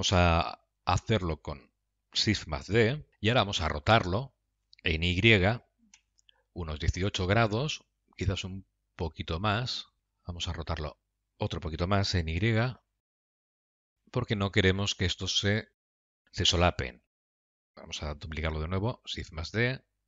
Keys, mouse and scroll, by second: 3.1 shift+d, 17.7 ctrl+z, 17.7 shift+r, 19.6 shift+d.